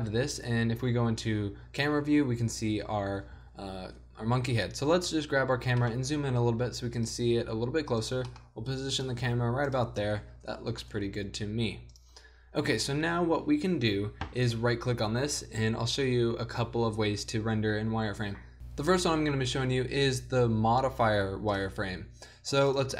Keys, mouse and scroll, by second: 0.2 z, 2.3 shift+z, 2.9 middle click, 3.6 z, 5.2 right click, 5.7 g, 7.5-10.8 typing, 21.6-22.9 drag.